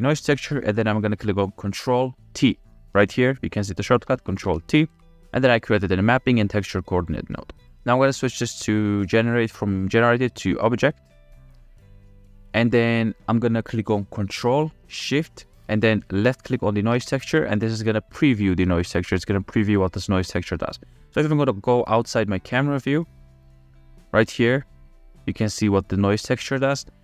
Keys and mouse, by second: 4.7 ctrl+t, 7.0 drag, 7.5 click, 7.8 ctrl+z, 8.4 click, 10.8-11.7 drag, 12.6 drag, 13.0 middle click, 16.7 ctrl+shift+click, 18.2-19.8 middle drag, 21.2-21.9 middle drag, 22.1 middle click, 23.4-23.9 middle drag, 24.3 shift+middle click.